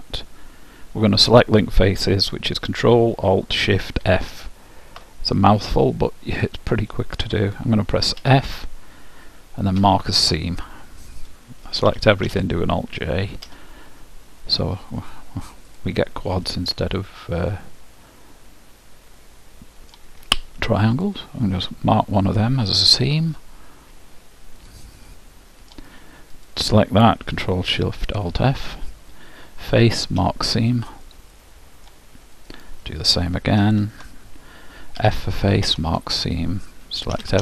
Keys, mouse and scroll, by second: 8.2 f, 12.0 a, 12.3 a, 13.6 alt+j, 15.8-17.6 drag, 16.6-18.4 middle drag, 21.0-24.0 drag, 24.7-28.2 drag, 25.3 middle click, 29.8 ctrl+alt+shift+f, 31.1-32.4 ctrl+alt+shift+middle drag, 32.4-34.2 drag, 35.1 ctrl+alt+shift+f, 37.2 a.